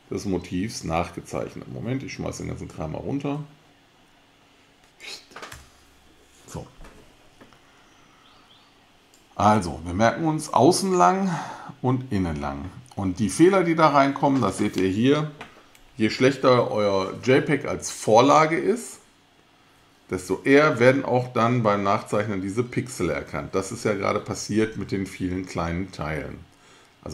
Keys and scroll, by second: 5.5 alt+BackSpace.